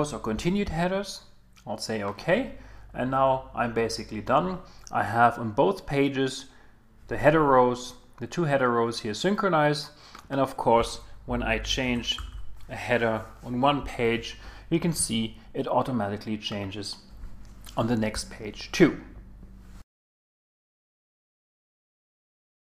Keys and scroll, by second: 11.4 shift+q.